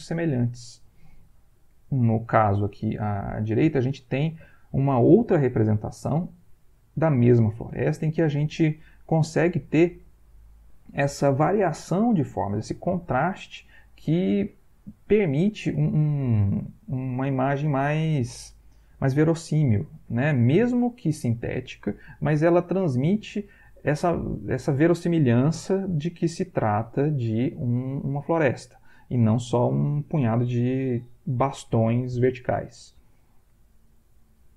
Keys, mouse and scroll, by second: 33.8 Right.